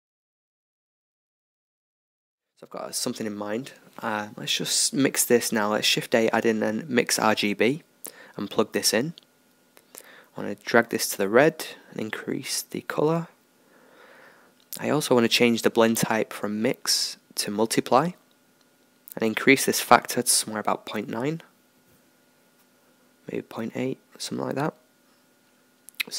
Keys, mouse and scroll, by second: 7.8-14.0 drag, 14.0-15.8 middle drag, 15.8-17.6 drag, 19.7-21.6 drag.